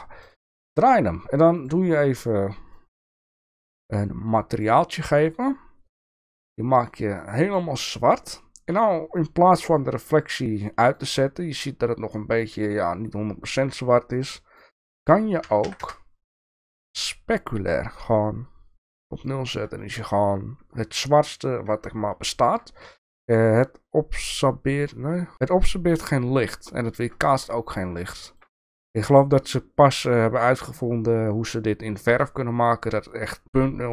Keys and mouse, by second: 1.6 click, 2.9 click, 4.4 click, 6.2 click, 10.5 click, 14.2 click, 14.9-16.5 drag, 18.2-19.4 drag, 22.4 shift+middle click, 28.3 shift+middle click.